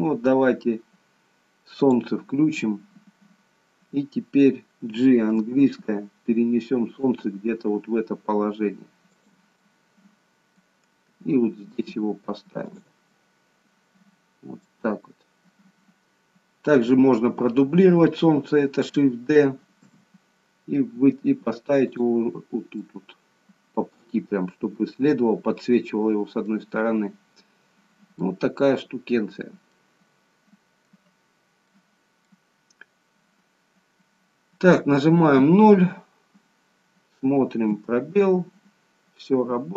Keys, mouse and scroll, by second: 2.7-3.6 scroll down 1, 3.6-5.5 scroll down 1, 5.5 g, 9.7 middle click, 11.2 g, 13.1 middle click, 19.6 shift+d, 22.9 middle click, 26.5 middle click, 29.0-29.6 scroll up 2, 29.8 middle click, 31.7 middle click, 35.3 KP_0, 37.8 space.